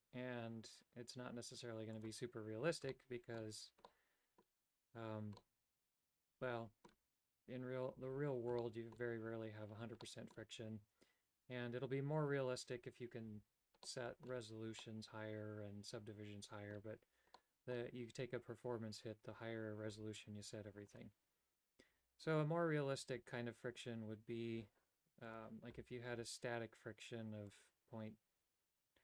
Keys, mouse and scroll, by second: 3.0 shift+middle click, 4.0 middle click, 5.5-7.1 middle drag, 8.7 shift+middle click, 10.1 middle click, 14.0 middle click, 14.9-16.9 middle drag, 17.6 middle click, 21.1 right click, 25.4-27.7 right drag, 27.7-29.0 drag.